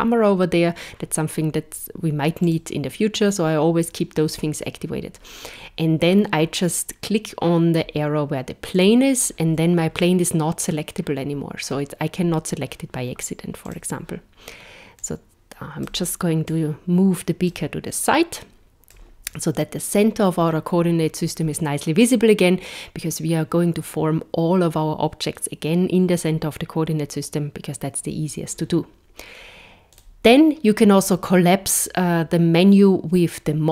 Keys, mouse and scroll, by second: 8.8 click, 13.7 click, 15.1 click, 16.5 click, 18.1 click, 29.9 click.